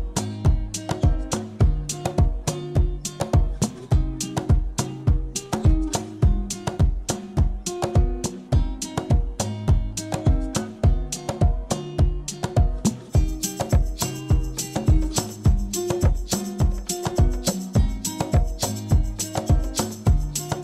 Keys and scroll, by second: 11.5 u, 13.9 p, 15.7 u, 17.8 F9.